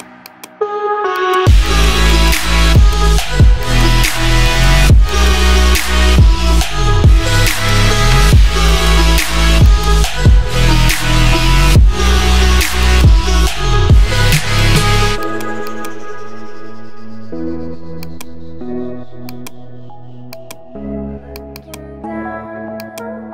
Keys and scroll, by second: 13.5 1, 13.7 Return.